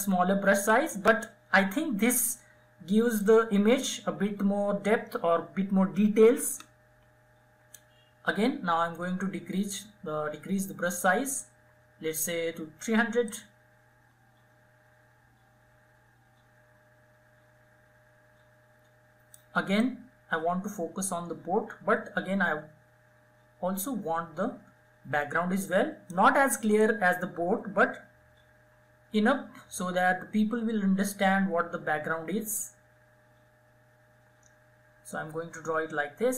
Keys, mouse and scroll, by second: 0.0-2.6 drag, 2.6-5.6 drag, 10.6 [, 10.8 [, 10.9 [, 11.3 [, 12.6-36.3 drag.